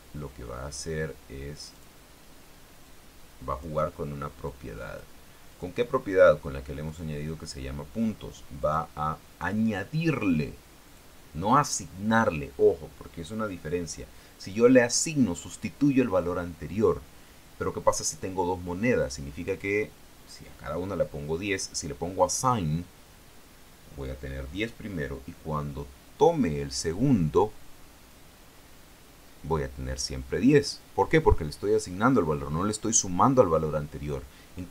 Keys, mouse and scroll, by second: 1.9 click, 3.0 click, 4.6 click, 5.6 click, 7.0 click, 8.8 click, 9.6 click, 11.0 click.